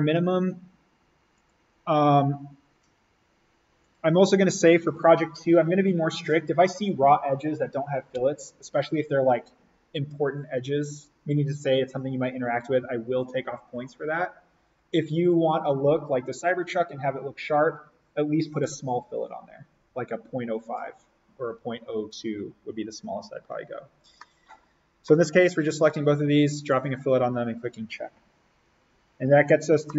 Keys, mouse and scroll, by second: 3.9 click, 24.0 scroll up 1, 24.1 middle click, 24.3 scroll, 26.5 click, 29.7 middle click.